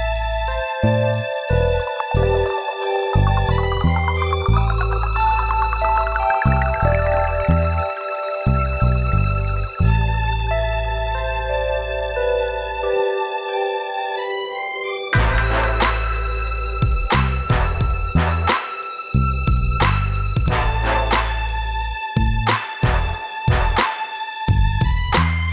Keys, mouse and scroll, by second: 0.7 click, 1.5 scroll up 2, 2.2 right click, 2.7 click, 2.8 click, 3.9 click, 4.7 click, 4.9 click, 5.7 click, 7.0 click, 7.5 click, 8.4 click, 8.9 scroll down 2, 10.0 click, 12.9 middle click, 15.2 click, 19.8 click, 20.3 click, 21.0 click, 22.7 click, 23.6 click, 23.8 click, 25.1 click.